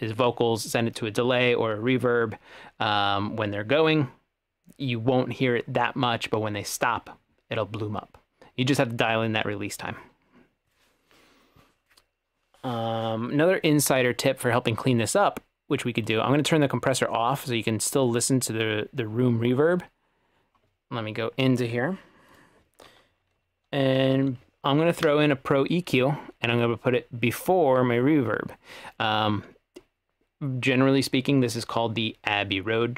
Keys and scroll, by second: 23.8-24.7 typing, 25.1 Return.